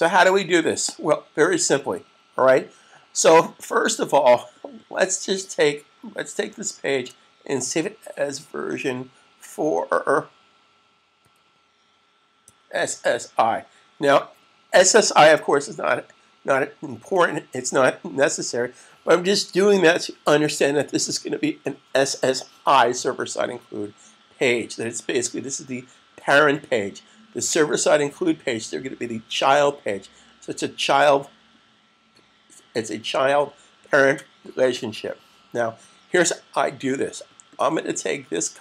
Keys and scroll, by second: 6.8 shift+super+s, 8.4 Right, 11.1 -, 12.2-13.7 typing.